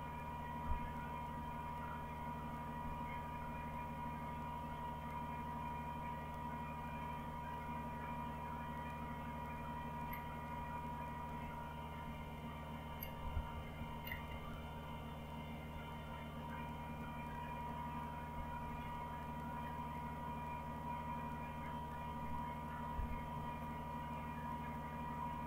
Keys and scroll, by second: 0.6 Page_Up, 1.4 Page_Up, 2.6 Page_Up, 3.5 Page_Up, 4.7 Page_Up, 8.9-10.1 Up, 10.5-11.5 Down, 12.0 Down, 12.8 Up, 13.2 Up, 13.3 Up, 13.5 Up, 13.8 Up, 14.0 Right, 14.2 Right, 14.4 Right, 15.7-17.3 Right, 17.3-18.3 Left, 18.6 Left, 18.8 Left, 22.9 ctrl+o.